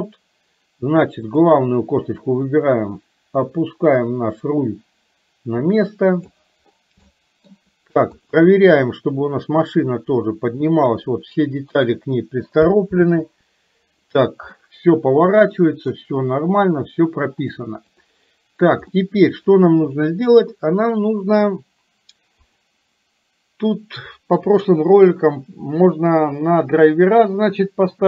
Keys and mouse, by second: 1.4 click, 2.4-6.4 drag, 7.2 shift+middle click, 9.9-12.0 drag, 13.0 ctrl+z, 14.7-15.9 middle drag, 17.5 click, 18.9 middle click, 22.4 click.